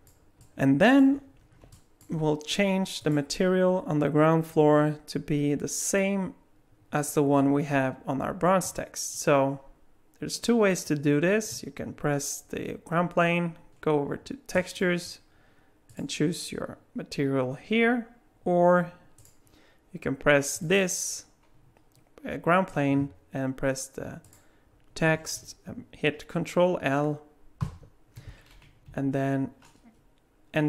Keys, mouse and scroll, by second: 0.4 middle click, 1.4 scroll down 2, 1.7 alt+middle click, 3.0 click, 14.5 click, 15.9 click, 20.5 click, 24.3 shift+click, 27.6 ctrl+l, 29.1 Down.